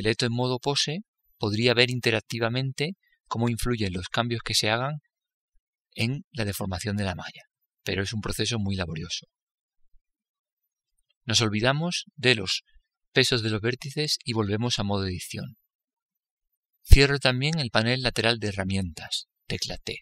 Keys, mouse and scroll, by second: 4.4 r, 14.3-14.8 scroll down 1, 14.8 middle click, 16.3 Tab.